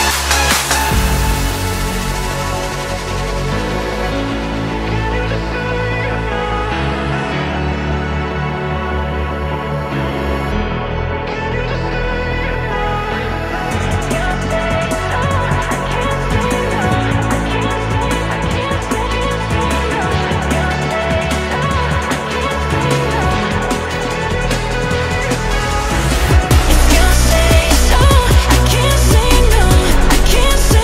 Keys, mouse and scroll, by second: 3.0-6.1 shift+middle drag, 6.1 ctrl+right click, 7.1 shift+middle click, 7.8 s, 11.3 shift+middle click, 11.7 s, 13.2-17.3 shift+middle drag, 17.3 g, 20.2 shift+middle click, 20.8 s, 24.4 g, 28.0 ctrl+right click, 28.7 shift+middle click, 29.2 s.